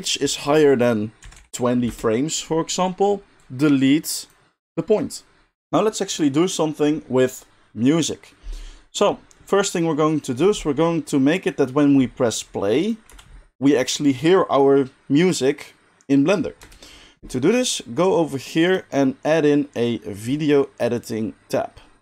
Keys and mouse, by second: 5.6-12.8 middle drag, 12.8-18.7 drag, 13.1 space, 16.6 space, 18.7-22.0 middle drag.